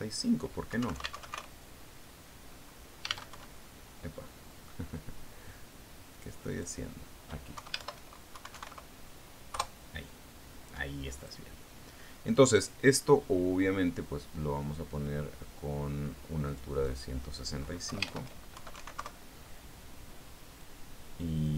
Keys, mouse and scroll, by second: 1.1 click, 2.2-2.8 typing, 2.5 Tab, 4.8 shift+Tab, 4.9 shift+KP_1, 7.6 click, 8.0 click, 9.0 Home, 9.3 shift+End, 9.8 shift+KP_1, 10.0 shift+KP_5, 11.0 KP_Enter, 12.6 click, 18.0 click, 18.3 click, 19.4 Home, 20.0 shift+KP_1, 20.2 shift+KP_6, 20.3 shift+KP_5, 20.5 shift+KP_Enter.